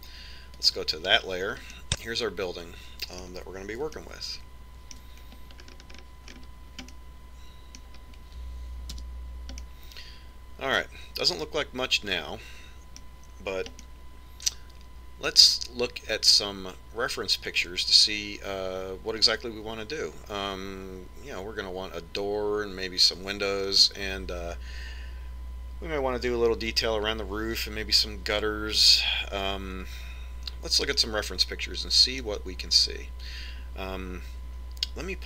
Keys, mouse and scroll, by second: 1.9 click, 3.0-4.8 middle drag, 5.2-7.0 middle drag, 7.0-8.2 scroll up 1, 8.2-10.0 middle drag, 10.3 KP_Decimal, 11.0-12.8 middle drag, 15.2-16.9 middle drag, 32.4-34.3 middle drag.